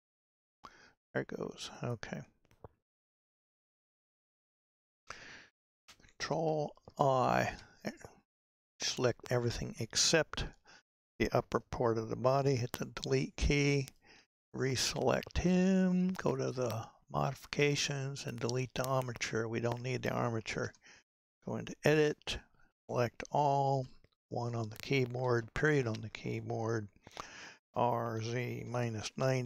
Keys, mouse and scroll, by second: 1.8 click, 4.0 n, 6.9 ctrl+i, 12.6 Delete, 13.9 click, 16.4 click, 18.2-20.7 drag, 20.7 Tab, 22.1 a, 23.8 KP_1, 25.3 KP_Decimal, 27.7 r.